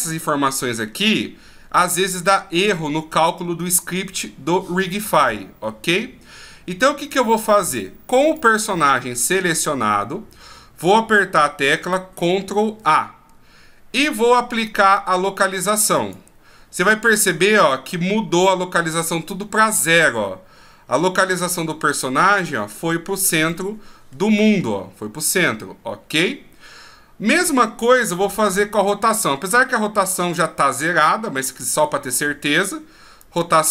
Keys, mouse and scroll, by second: 8.2 right click, 19.7 middle click, 21.5-22.4 scroll down 1, 23.5 middle click, 28.6 shift+a.